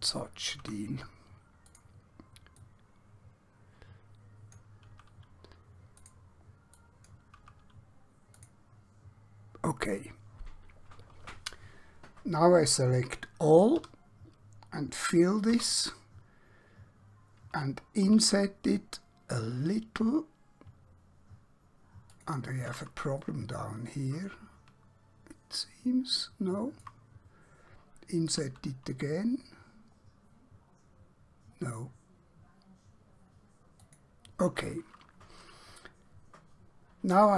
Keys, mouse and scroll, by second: 0.7 x, 1.7 click, 5.0 x, 5.9 click, 7.5 x, 8.5 click, 13.7 typing, 15.5 typing, 18.0 i, 22.1 click, 23.3 shift+middle click, 33.8 click.